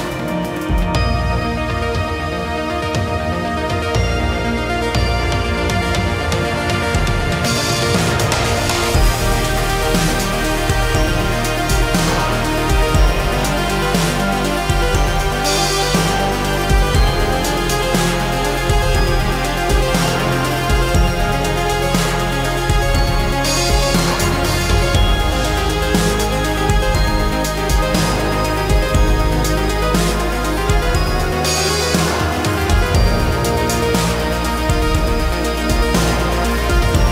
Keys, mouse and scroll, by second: 17.5 Escape.